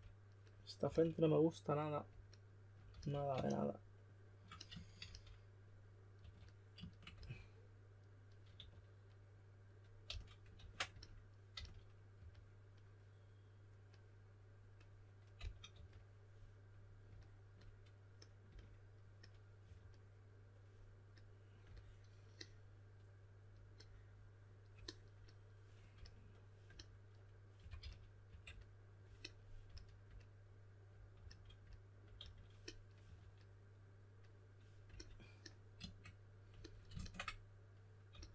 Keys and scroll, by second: 0.8 typing, 2.8 s, 5.0-7.1 typing, 8.3-10.0 typing, 10.5 super+z, 11.5-12.6 typing, 15.3-15.7 typing, 19.6 4, 25.9 s, 27.3-29.6 typing, 31.1-33.5 typing, 38.1 s.